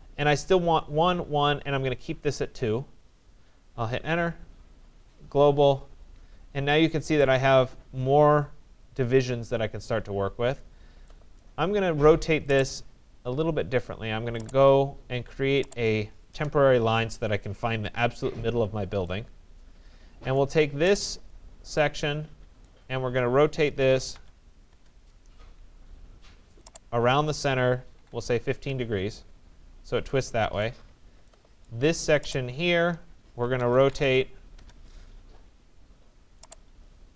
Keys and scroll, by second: 3.3 Return, 15.9 Return, 24.2 Return, 27.7-28.6 typing, 28.7 Return, 34.2 Return.